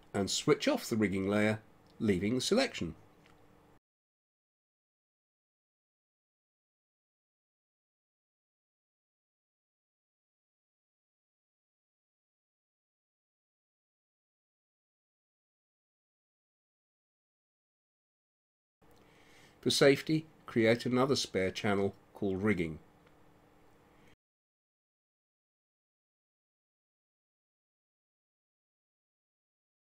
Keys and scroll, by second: 13.1 space.